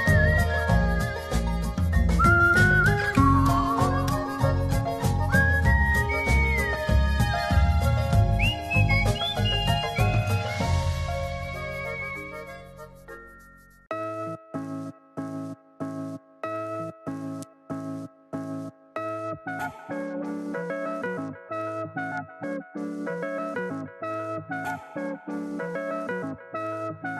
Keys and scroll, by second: 11.6 shift+super+i, 13.3 super+j, 17.2 z.